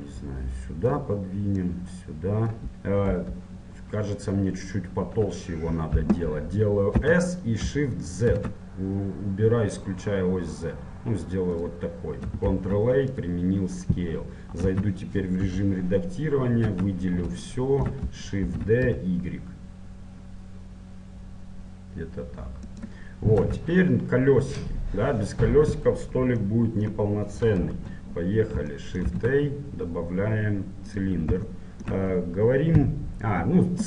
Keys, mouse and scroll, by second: 1.9-4.0 drag, 3.2 KP_1, 4.0-7.2 middle drag, 7.2 s, 13.4 ctrl+a, 14.8 Tab, 15.6 KP_7, 16.3-19.6 middle drag, 16.8 a, 18.6 shift+d, 23.6 Tab, 26.6-31.1 middle drag, 27.7 KP_1, 31.1 shift+a, 31.7-33.8 middle drag.